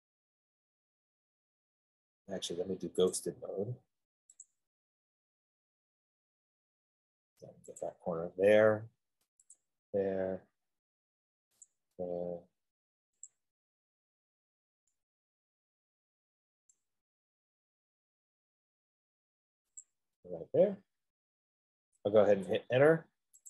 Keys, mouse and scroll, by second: 3.5 click, 4.7 click, 8.1 click, 10.6 middle click, 10.7 middle click, 12.0 click, 13.1 F15, 13.6 click, 17.0 right click, 20.3 click, 20.9 middle click, 21.1 middle click, 22.5 Return.